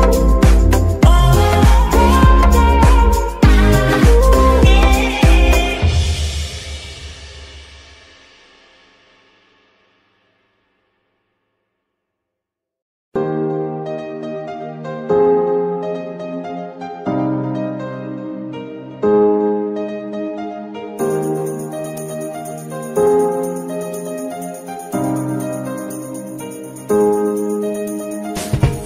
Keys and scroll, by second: 11.2 z, 14.5 g, 14.6 y, 15.7 Escape, 20.9 y, 22.4 Escape, 28.2 y.